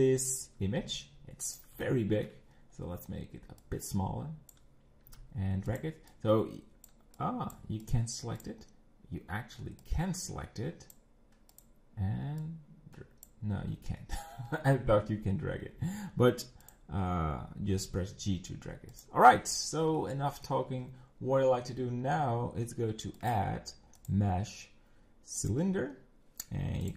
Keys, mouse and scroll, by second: 0.8 g, 1.8-3.6 shift+middle drag, 3.6 click, 5.1 g, 6.1 click, 7.2 click, 7.8 click, 8.4 click, 9.8 click, 11.5 click, 12.4 click, 16.6 click, 17.7 g, 19.3-19.7 scroll up 6, 20.1-23.0 shift+middle drag, 23.2-26.2 drag, 26.8 click.